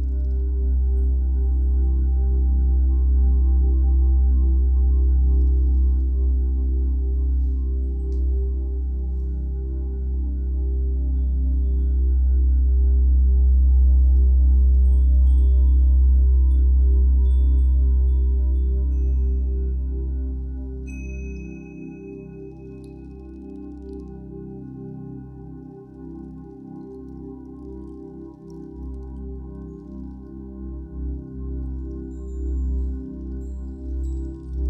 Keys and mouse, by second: 2.6-3.9 drag, 4.8 click, 5.9 click, 7.8 click, 8.1-9.4 drag, 10.4 click, 11.3 alt+click, 12.0 click, 12.4-13.2 drag, 14.4 drag, 15.5 click, 17.2-19.8 drag, 20.3 s, 21.7-22.9 drag, 23.1 alt+shift+click, 23.9 g, 24.3 x, 26.2 click, 27.4-33.1 drag, 33.8-34.6 drag.